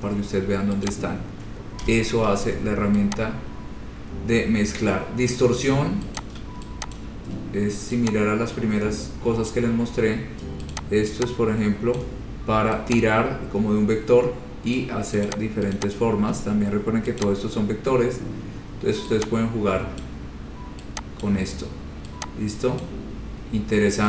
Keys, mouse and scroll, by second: 0.1-1.0 scroll down 8, 1.1 click, 1.4 scroll down 1, 1.4 scroll, 2.1 Delete, 5.8 click, 6.4 click, 7.2 ctrl+click, 9.7 click, 10.3 scroll, 11.0 click, 12.2 click, 15.0 click, 15.5 click, 16.0 click, 17.5 click, 20.3 click, 21.4 click, 23.1 click.